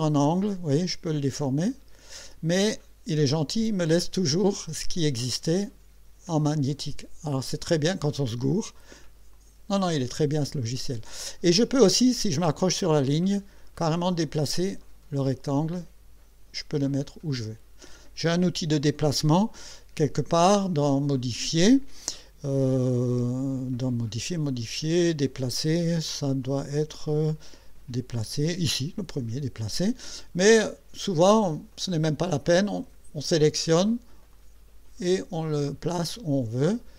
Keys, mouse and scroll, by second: 0.0-2.2 drag, 9.3 click, 13.8-15.4 drag, 16.9 click, 34.3-36.4 drag.